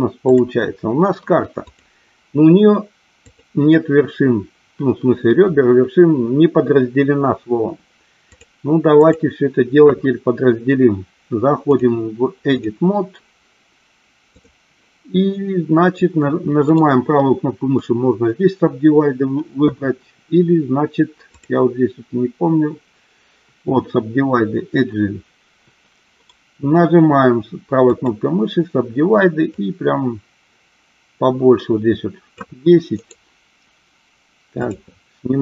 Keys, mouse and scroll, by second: 1.8 click, 3.3 click, 8.4 click, 9.1 click, 11.8-13.0 drag, 14.4 click, 16.8-19.6 right drag, 21.4-25.7 drag, 26.3-28.2 right drag, 29.7-32.6 drag, 33.2-34.8 right drag.